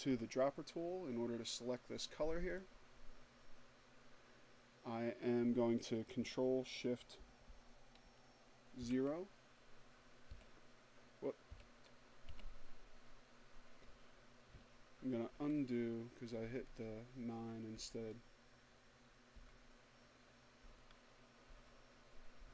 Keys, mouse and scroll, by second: 0.5 click, 6.6 ctrl+shift+9, 8.1 9, 9.3 0, 17.0 ctrl+z, 18.5 z, 19.3 z, 20.3 z.